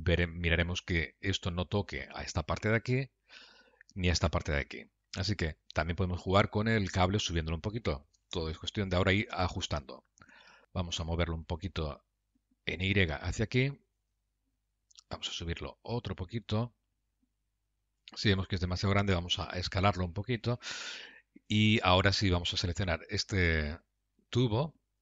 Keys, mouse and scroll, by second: 2.6-3.4 scroll down 3, 3.0 middle click, 8.8 KP_3, 10.6 Tab, 11.3 g, 15.3 g, 18.2 Tab, 18.6 s, 21.6 Tab, 22.5 click, 23.0 Tab.